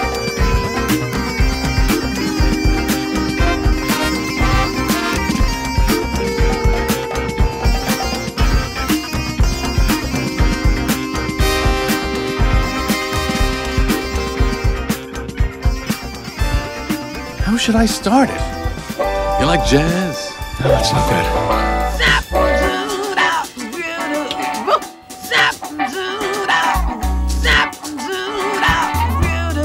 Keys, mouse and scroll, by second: 3.2-4.5 drag, 4.8 click, 5.4 Tab, 5.7 middle click, 6.4 alt+a, 7.7-8.9 middle drag, 17.8 middle click, 18.5 click, 18.8 shift+click, 20.8 g, 23.2 click, 23.6 click, 24.2 g, 25.6 click, 25.6-26.5 typing, 27.1-27.5 drag, 28.0 g, 28.5 click, 29.1 g.